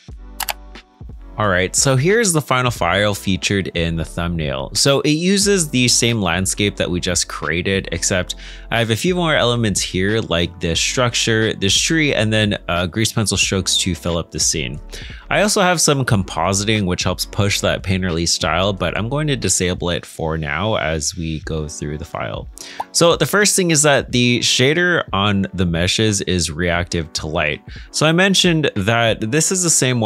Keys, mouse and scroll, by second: 2.6 middle click, 13.8 middle click, 22.5 middle click, 25.7 scroll up 1, 26.4 middle click.